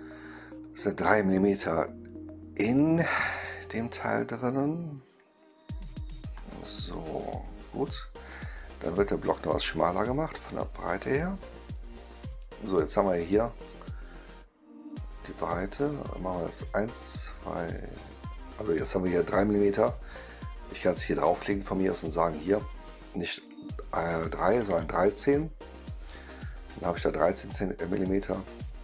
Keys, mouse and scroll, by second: 6.3-6.8 right drag, 7.2 click, 8.2 click, 9.4 click, 11.0-20.6 drag, 22.1 click, 27.8 click.